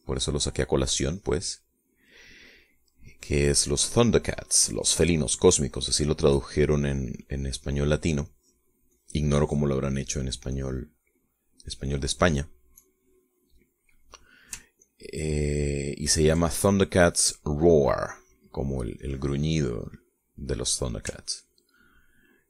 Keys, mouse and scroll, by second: 0.7 click, 2.0-3.1 drag, 3.4-5.2 middle drag, 5.3 click, 6.5 click, 7.5 click, 8.3 click, 9.4 click, 10.1 click, 11.7 click, 12.7 middle click, 13.9-15.4 drag, 16.0-17.6 ctrl+drag, 17.7 ctrl+middle click, 18.5-19.9 middle drag, 19.9 scroll up 1, 20.1-21.7 drag, 22.2-22.4 ctrl+drag.